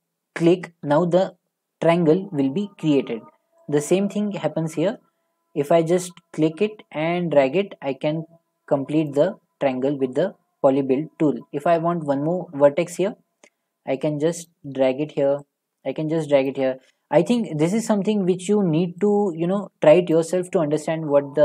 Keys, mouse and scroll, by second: 0.5 ctrl+click, 9.1 ctrl+click, 9.7-21.4 ctrl+drag.